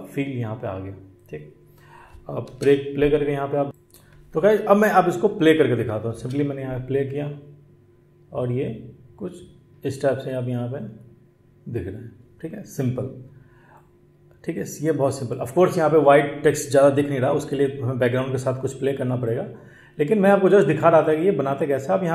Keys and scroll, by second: 2.4 space, 6.1 space.